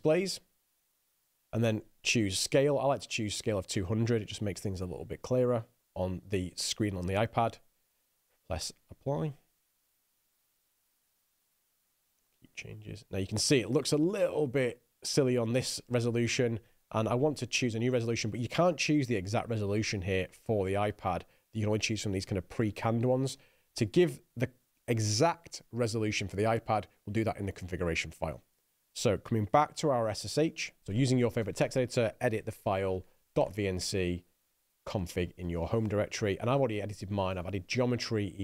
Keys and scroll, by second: 29.7-35.2 typing, 35.3 Tab, 35.8 Return.